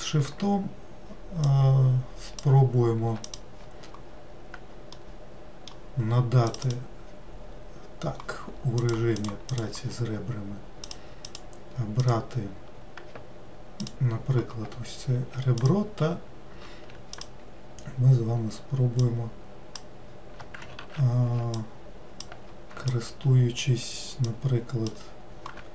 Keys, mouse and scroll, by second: 1.5 shift+click, 3.3 click, 4.9-6.5 middle drag, 6.5 click, 8.8 click, 9.1 click, 9.5-10.9 drag, 11.2 click, 12.0 click, 13.8-15.7 alt+drag, 17.1 shift+click, 19.0 shift+click, 20.7 ctrl+z, 21.6 alt+click, 22.9 ctrl+click, 24.2-25.7 ctrl+drag.